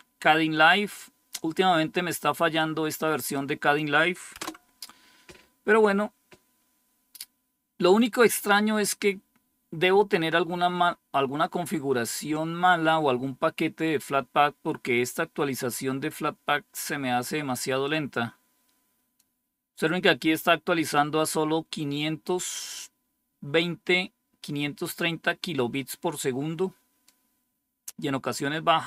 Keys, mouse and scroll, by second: 2.5 click, 4.3 Return, 17.7-19.8 drag, 25.6-27.5 drag, 27.6 click.